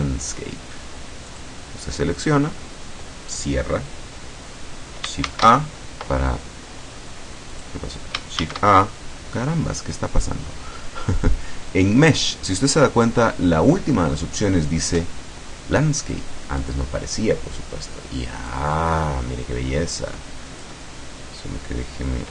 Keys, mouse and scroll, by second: 1.3 click, 2.3 click, 5.3 shift+a, 7.6 click, 8.5 shift+a, 16.7 click, 18.5-20.9 drag.